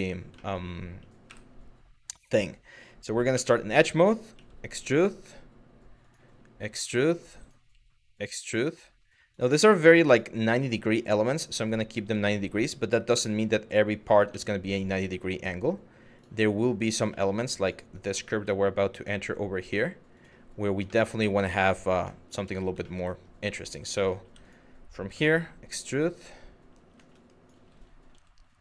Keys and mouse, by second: 0.0 shift+middle click, 0.9 w, 3.0 2, 4.0 e, 5.6 click, 5.8 e, 6.6 click, 7.0 click, 8.1 click, 8.9 click, 9.7 click, 10.2 click, 11.2 click, 11.9 middle click, 12.8 1, 13.1 click, 13.9 g, 14.5 click, 14.8 click, 15.1 g, 15.8 click, 16.3 click, 17.2 click, 17.6 click, 18.6 click, 19.1 click, 19.8 click, 20.5 middle click, 21.8 middle click, 22.4 shift+middle click, 23.9 2, 24.0 click, 24.8 e, 25.7 click, 26.9 click, 28.5 click.